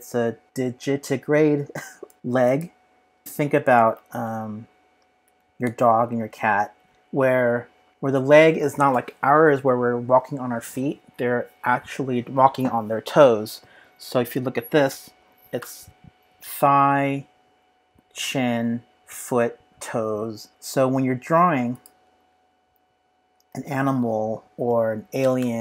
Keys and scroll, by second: 4.1 super+Tab, 5.3 super+Tab, 5.6 super+Tab, 22.3 super+Tab, 23.6 super+Tab, 24.3 super+Tab, 25.4 super+Tab.